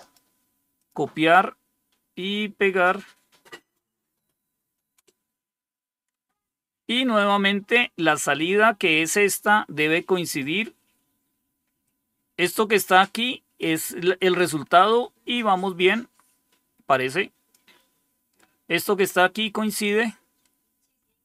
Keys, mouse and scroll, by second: 0.7 click, 2.2-3.8 right drag, 4.8 Return, 9.4 scroll down 2, 11.8-13.5 drag, 15.6-17.4 drag, 19.5 scroll down 2.